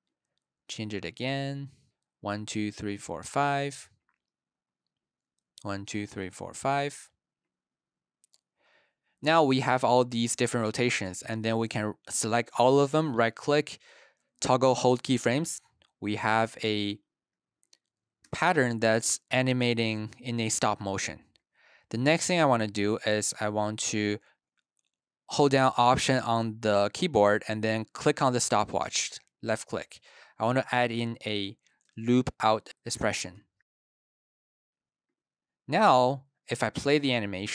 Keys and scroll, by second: 2.0 super+Right, 2.3 super+Right, 5.3 super+Right, 5.6 super+Right, 16.3 space, 18.0 space, 19.8 space, 31.2-32.3 typing, 33.4-34.5 typing, 36.9 space.